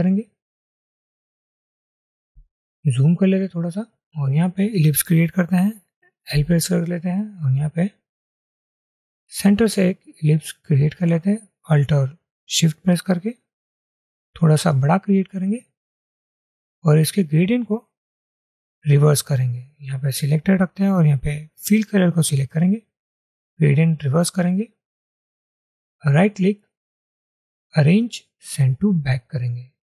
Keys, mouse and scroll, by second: 3.2-3.9 alt+scroll up 1, 6.5 l, 10.9 alt+click, 26.3 right click.